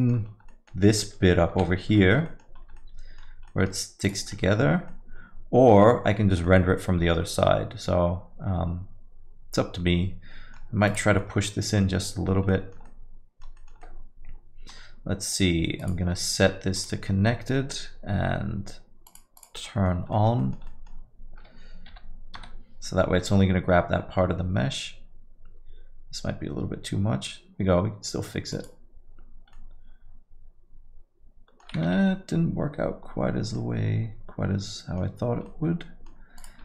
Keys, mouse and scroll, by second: 0.0 middle click, 0.3 scroll up 2, 0.5 alt+middle click, 0.9 middle click, 1.2-1.5 scroll up 2, 1.5 z, 2.2 middle click, 2.2-2.7 scroll up 3, 2.7 alt+middle click, 3.4 middle click, 4.0 click, 5.7 Tab, 5.7 middle click, 6.2 scroll down 3, 6.4 alt+middle click, 10.9 click, 11.4 alt+middle click, 12.5 middle click, 12.8 alt+middle click, 13.6 middle click, 13.8 alt+middle click, 15.8 click, 19.4 click, 19.7 middle click, 19.9 scroll down 2, 20.1 alt+middle click, 20.4 middle click, 20.7 alt+middle click, 24.6 g, 29.5 alt+middle click, 33.0 ctrl+z, 33.6 alt+middle click, 35.5 alt+middle click.